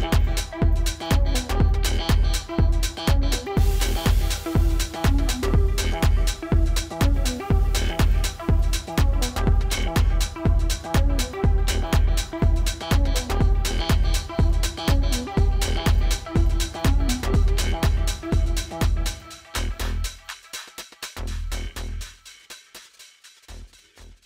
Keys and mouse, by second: 15.0 click.